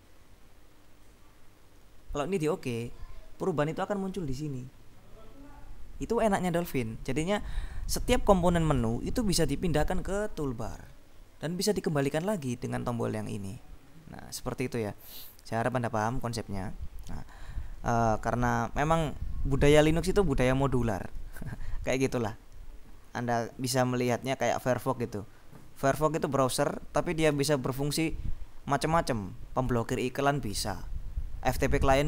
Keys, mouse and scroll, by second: 15.4 click.